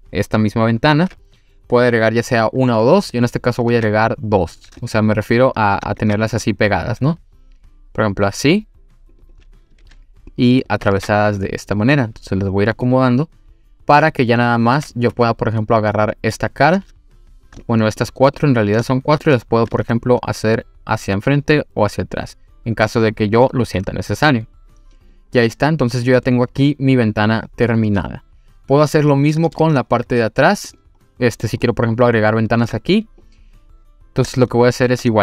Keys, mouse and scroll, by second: 3.7 ctrl+r, 5.4 click, 6.0 ctrl+r, 9.1 click, 9.3 click, 9.8 ctrl+r, 10.6 click, 10.9 ctrl+r, 12.8 click, 13.1 click, 13.6-14.0 scroll down 1, 15.1 3, 15.5 click, 15.9 middle click, 17.6 shift+click, 18.0 shift+click, 18.4 shift+click, 18.8-19.2 middle drag, 19.7 e, 25.0 click, 25.4-25.8 scroll down 1, 26.0 click, 26.3-29.6 middle drag, 29.8-30.7 scroll down 3, 30.7 click, 31.1-31.4 middle drag, 31.6-32.3 middle drag, 34.4-35.0 shift+middle drag.